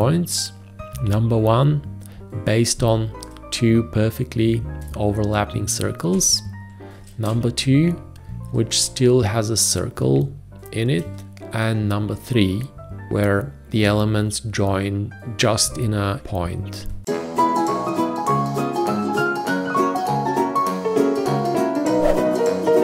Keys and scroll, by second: 6.1 ctrl+space, 8.2 ctrl+space.